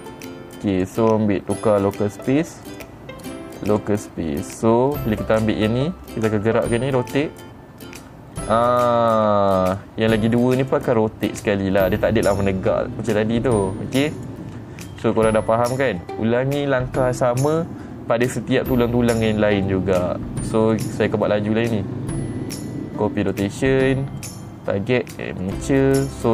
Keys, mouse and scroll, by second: 1.2 click, 2.4 click, 3.2 click, 4.2 click, 5.0 click, 7.7 r, 10.2 right click, 10.8 click, 11.2 click, 13.9 click, 14.7 click, 15.6 r, 16.5 right click, 18.8 click, 20.2 middle click, 21.2 click, 22.2 click, 23.8 click, 24.7 click, 25.9 click.